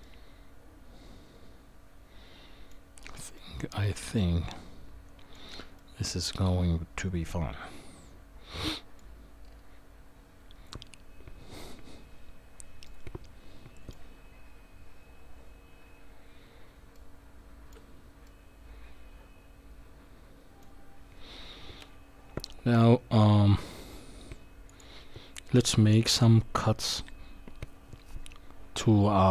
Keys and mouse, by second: 0.0-2.7 middle drag, 3.3-5.3 middle drag, 5.8-9.0 middle drag, 12.8-13.9 middle drag, 16.9-17.7 shift+middle drag, 18.2-21.8 middle drag, 21.8 KP_1.